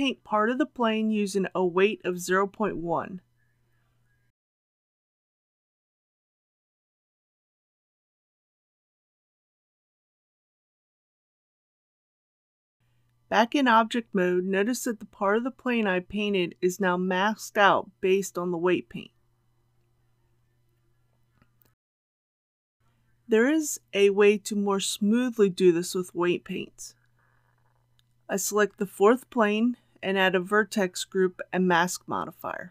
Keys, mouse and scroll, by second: 1.2 click, 1.9 KP_Decimal, 2.1 KP_1, 4.9-23.1 drag, 30.3 Tab, 32.2 click.